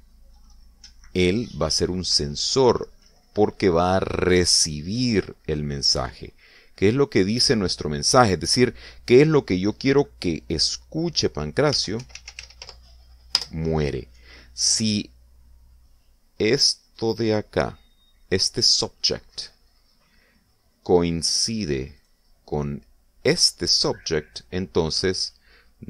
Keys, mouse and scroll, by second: 6.7 click, 12.4-13.9 typing, 14.3 Return, 17.8 right click, 23.0 right click.